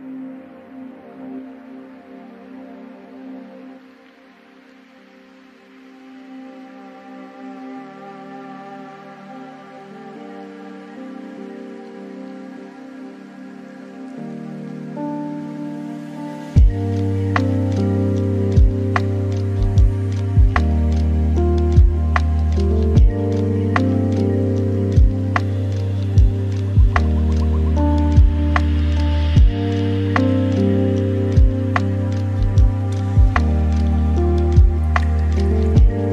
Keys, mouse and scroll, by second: 1.5 ctrl+a, 3.4 KP_3, 4.2 g, 6.4-7.2 scroll up 3, 7.2 g, 9.9 scroll down 2, 10.4-11.1 middle drag, 11.1 ctrl+a, 12.2 middle click, 13.0 shift+a, 15.0 scroll down 3, 15.8 s, 20.6 g, 23.1 Tab, 25.0-26.1 drag, 26.9 e, 28.4 Tab, 29.4 click, 30.8-35.3 drag, 35.3-36.1 right drag.